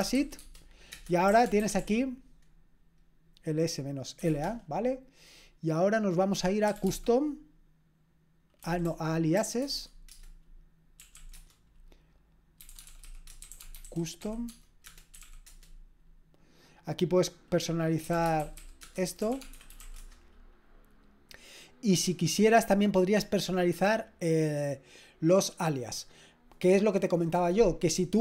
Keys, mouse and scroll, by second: 0.0-2.3 typing, 0.9 Return, 4.2 typing, 4.3 Return, 6.4-7.3 typing, 8.4-16.0 typing, 10.1 Return, 14.9 Return, 17.8-20.3 typing.